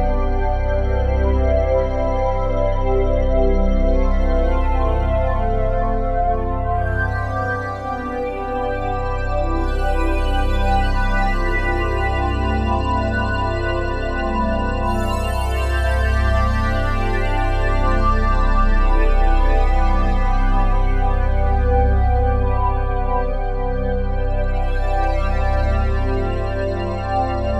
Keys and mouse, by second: 2.5 alt+shift+click, 4.9-10.0 alt+drag, 10.6 7, 14.7 click, 16.6 click, 17.5 shift+click, 20.0 shift+click, 21.2 shift+click, 22.0 alt+click, 23.2 shift+click, 23.7 shift+click, 25.2 click, 26.0 0, 26.2 Return.